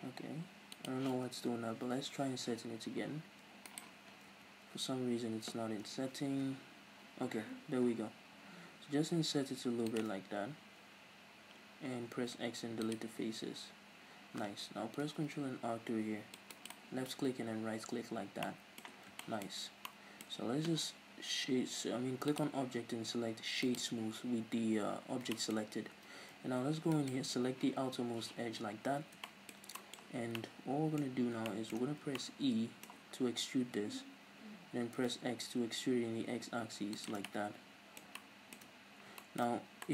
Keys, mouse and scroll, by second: 0.7 click, 1.2 ctrl+z, 3.7 right click, 3.9 scroll down 1, 4.2 ctrl+z, 4.8 scroll up 1, 5.6 scroll down 1, 5.8 f, 6.5 i, 9.9 shift+click, 10.1 scroll up 2, 11.9 x, 13.4 scroll down 2, 13.7 scroll up 2, 14.7 ctrl+r, 16.6 click, 16.7 right click, 17.0 scroll down 1, 17.4-17.8 scroll up 1, 17.8 Tab, 18.4-22.2 middle drag, 18.9 scroll down 1, 19.5 scroll up 2, 22.2-25.3 drag, 25.3-26.9 shift+middle drag, 25.7-26.3 scroll up 2, 26.3 Tab, 26.9 alt+right click, 27.7-29.2 scroll down 2, 29.2-37.0 shift+middle drag, 30.1 scroll down 2, 31.0 scroll up 2, 31.1 scroll down 2, 31.8 scroll down 1, 33.6 e, 37.0 shift+click, 37.2-39.3 middle drag, 38.8-39.1 scroll up 2, 39.4-39.8 scroll down 1.